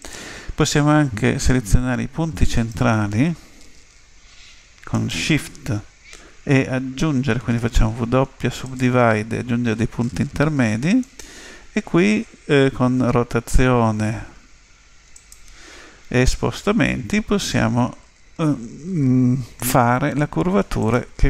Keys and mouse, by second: 2.6-4.4 right drag, 4.9-6.7 right drag, 7.6 w, 11.0-12.8 right drag, 12.7 r, 16.1 g.